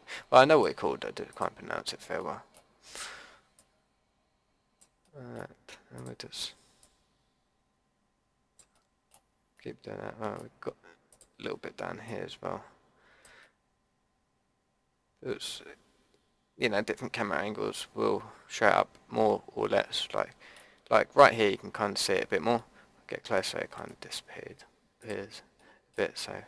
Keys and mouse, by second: 2.2 middle click, 3.6-5.0 drag, 6.8-8.5 drag, 8.7-10.1 middle drag, 11.1-13.5 drag, 13.5-15.4 middle drag, 22.6-26.4 drag.